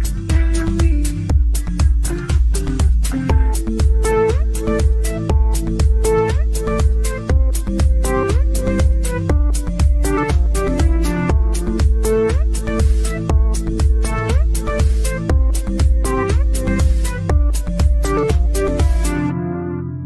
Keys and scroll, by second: 13.4 ctrl+z.